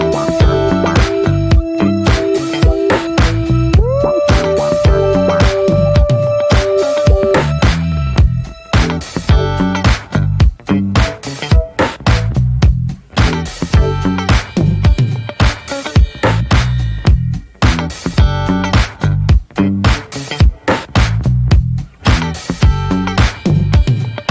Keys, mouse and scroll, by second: 0.0 scroll down 1, 0.2 shift+middle click, 0.3-0.6 scroll up 1, 0.6-1.5 scroll down 1, 1.5-2.0 scroll down 1, 2.0-2.7 scroll down 1, 2.7 click, 2.9 scroll down 1, 3.0-3.6 scroll up 2, 3.3 ctrl+z, 3.6 shift+middle click, 4.4-6.9 drag, 6.9 f, 8.8 click, 9.1-9.5 scroll down 4, 9.5 shift+middle click, 9.8-10.4 scroll up 2, 10.4 shift+middle click, 10.7 scroll up 1, 11.0 ctrl+z, 11.3 alt+middle click, 12.3-15.8 drag, 17.9 click, 18.2 ctrl+z, 20.9-23.4 drag, 23.8 scroll down 3, 24.2-24.3 scroll up 3.